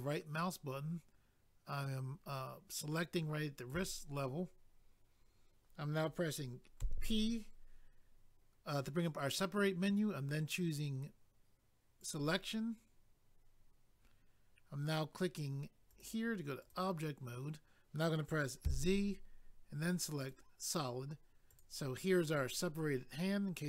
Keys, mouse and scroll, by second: 7.8 p, 12.0 click, 12.1 click, 15.9 click, 16.0 click, 16.6 click, 16.7 click, 20.2 click, 20.3 click, 21.5 click, 21.6 click.